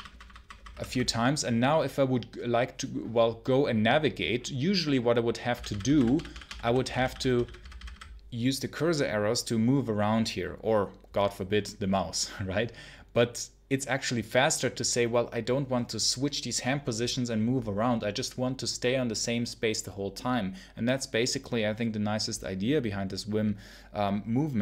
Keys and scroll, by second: 0.0-0.6 typing, 5.4-7.5 typing.